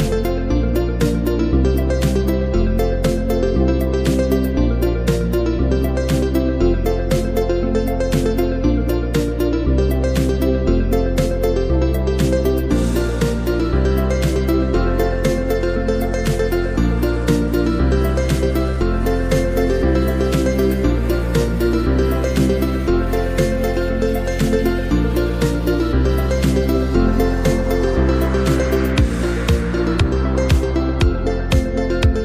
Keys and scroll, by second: 6.5 super+-, 6.7 super+-, 7.5 space, 10.2 super+z, 12.5 z, 13.1 v, 30.9 space.